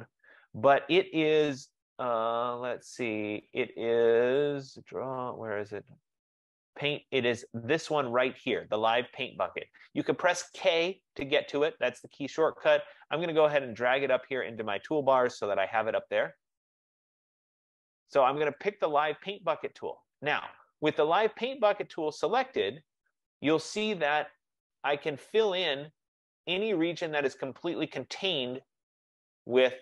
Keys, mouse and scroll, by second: 15.3 click, 18.7 click, 22.5 click.